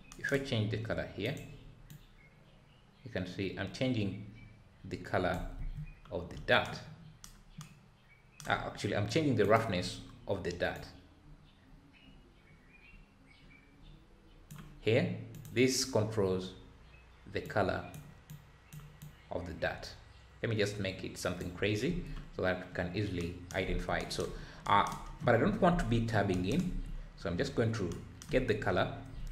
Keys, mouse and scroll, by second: 1.9 click, 10.7 click, 18.3 click.